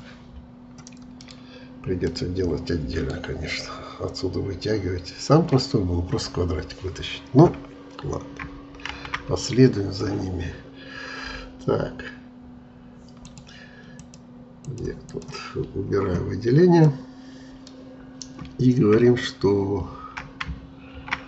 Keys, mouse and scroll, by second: 1.1 middle click, 1.7 scroll up 1, 2.0-3.1 middle drag, 3.1-3.6 scroll down 2, 3.6-6.1 middle drag, 6.1-7.7 scroll up 2, 7.7-8.5 scroll up 1, 8.5-8.9 scroll up 1, 8.9 shift+a, 13.2-16.8 drag, 16.8-19.9 middle drag, 20.9 shift+a.